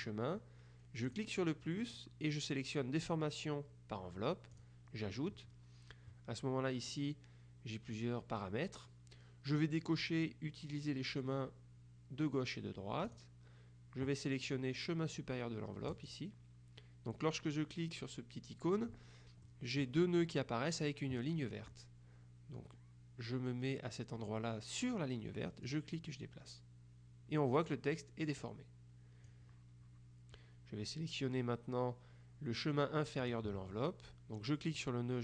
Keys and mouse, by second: 1.2 click, 4.7 click, 13.2 click, 16.0 click, 19.5 middle click, 25.7-29.9 drag, 33.3 click, 34.9-35.2 drag.